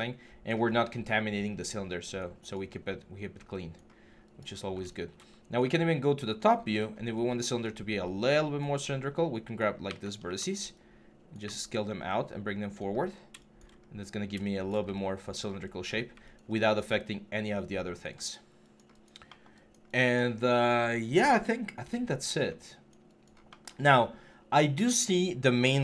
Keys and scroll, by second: 9.6 w, 12.8 3, 13.6 6.